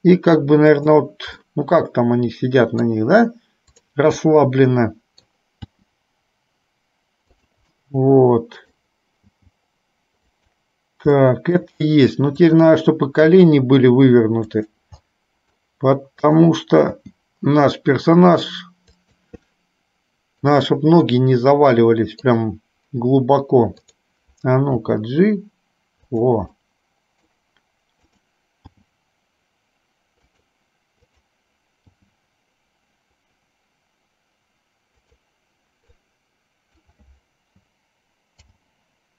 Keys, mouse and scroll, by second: 1.5-3.1 middle drag, 4.4-5.5 middle drag, 5.9 g, 7.9-8.9 middle drag, 9.5 g, 11.4 middle click, 12.5 click, 13.5 g, 15.4 middle click, 16.4 click, 17.1 g, 19.8 middle click, 21.3-22.5 middle drag, 23.9 click, 25.0 g, 26.8 middle click, 28.3 click, 28.9 g, 31.3 click, 32.1 g, 36.1-37.1 drag, 38.5 alt+g.